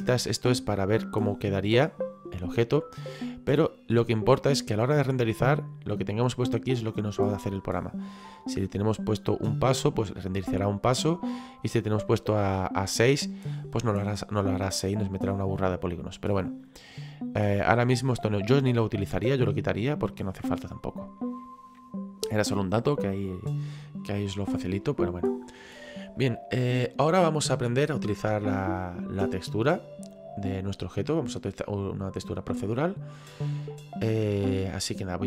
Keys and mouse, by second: 0.3 click, 1.4 click, 3.0 click, 11.3 click, 16.2 click, 19.6 click, 20.2 middle click, 24.2 middle click, 26.1 middle click, 29.2 middle click.